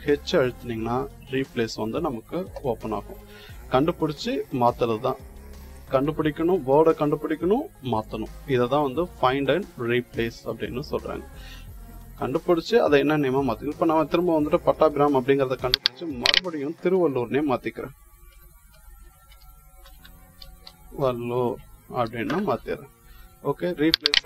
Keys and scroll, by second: 17.2-21.8 typing.